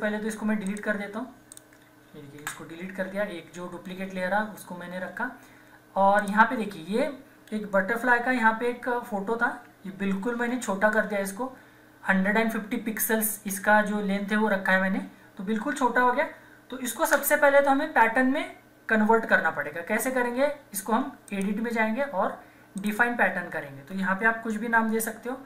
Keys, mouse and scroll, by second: 0.6 ctrl+click, 2.4 ctrl+Delete, 6.1 ctrl+click, 8.0 ctrl+=, 10.2 ctrl+-, 21.2 click.